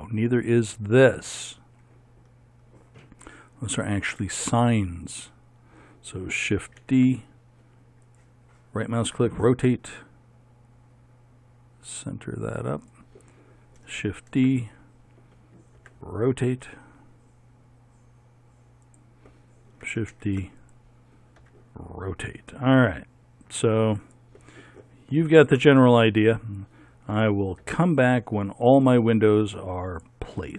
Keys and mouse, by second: 4.1 shift+s, 6.9 shift+d, 9.1 r, 14.1 shift+d, 15.8 r, 20.2 shift+d, 21.4 r, 25.3 shift+d, 27.7 r.